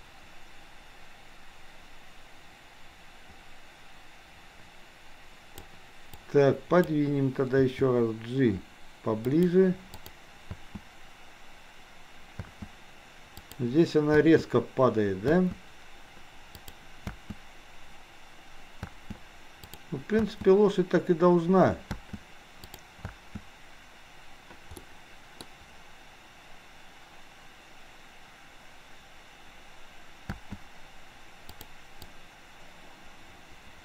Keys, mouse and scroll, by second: 6.2-6.9 drag, 7.7 g, 9.9 click, 10.4 space, 13.4 click, 16.7 click, 19.7 click, 22.7 click, 24.8 middle click, 24.8 space, 30.2 space, 31.7 click, 32.2-33.8 drag.